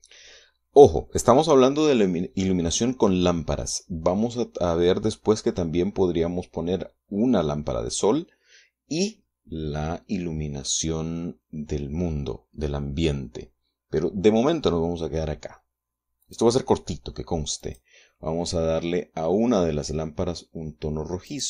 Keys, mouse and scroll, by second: 1.2-1.7 scroll down 2, 1.7-3.8 middle drag, 16.6 click, 18.0 click.